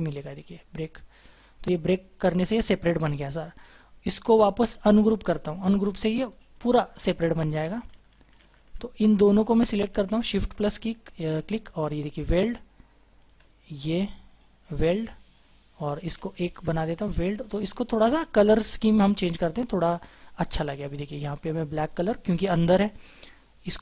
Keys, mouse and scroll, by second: 1.2 double click, 3.4 ctrl+z, 4.2 right click, 5.5 double click, 7.9 ctrl+z, 8.3 ctrl+z, 9.1-9.8 scroll up 1, 10.2 shift+click, 12.4-13.3 scroll down 1, 13.6 shift+click, 15.3-16.1 scroll up 1, 16.1-16.4 scroll up 1, 16.4 shift+click, 17.5 double click, 18.0-18.3 scroll down 1, 18.6-19.2 scroll up 1, 19.2-20.0 scroll down 1, 20.0-20.6 scroll up 1.